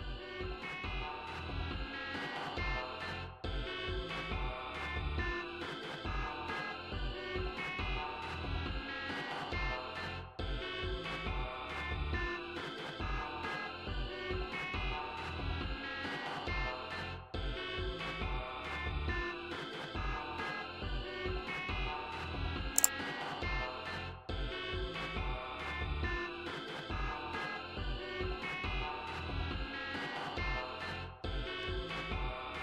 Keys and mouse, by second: 0.6-4.1 drag, 6.4 click, 11.4 click, 12.1 click, 12.6 click, 13.1-29.4 drag, 30.4 click.